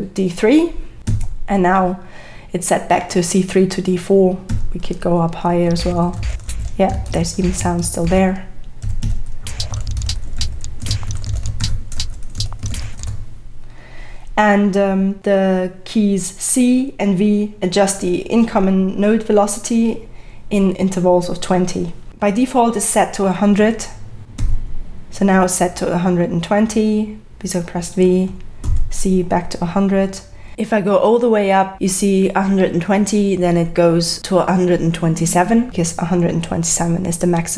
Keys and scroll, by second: 1.1 x, 4.5-13.5 typing, 24.4 v, 28.6 c, 31.2 v.